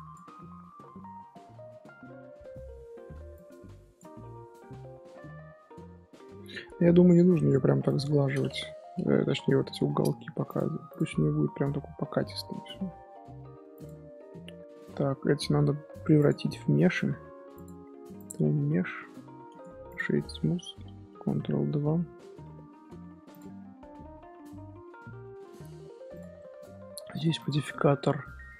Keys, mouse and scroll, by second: 0.3-3.3 middle drag, 3.3-4.2 drag, 4.2-7.3 middle drag, 7.8-9.8 drag, 9.8-10.4 middle drag, 10.4 click, 10.9 click, 11.1-13.7 middle drag, 13.7 click, 16.2-19.2 drag, 19.4-23.3 right drag, 23.3 click, 23.5-26.1 middle drag, 26.1 click, 26.3 shift+middle click, 27.1 click.